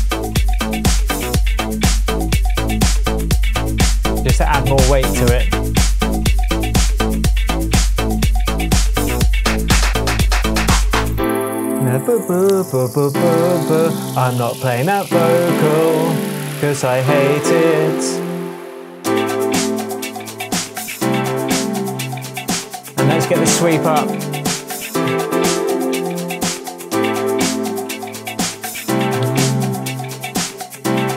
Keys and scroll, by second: 21.8 super+t, 29.2 Right, 30.7 Left.